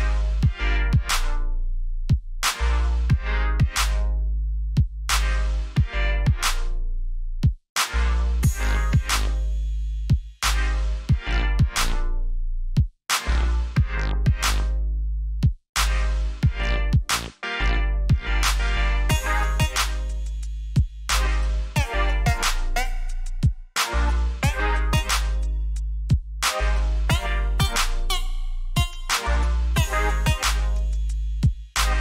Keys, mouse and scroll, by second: 2.1 click, 3.0 Escape, 3.7 alt+scroll up 1, 4.6 alt+scroll down 1, 5.5 scroll up 1, 5.8-6.3 alt+scroll down 1, 6.7 alt+scroll up 1, 7.4-7.7 alt+scroll down 1, 8.9 click, 9.8 Escape, 11.7 click, 17.4 KP_Enter, 19.0 alt+scroll up 1, 20.7 alt+scroll up 1, 21.8 alt+scroll up 1, 22.4 alt+scroll up 1, 23.7-24.3 alt+scroll up 2, 25.2 alt+scroll up 1, 26.1 ctrl+j, 27.9 click, 30.8 click.